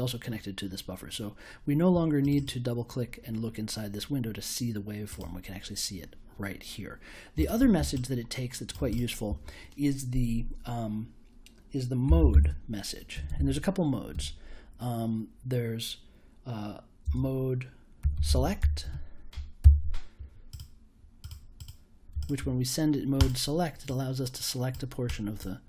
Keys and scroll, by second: 11.7-14.1 typing, 17.0-19.3 typing, 19.6 super+j.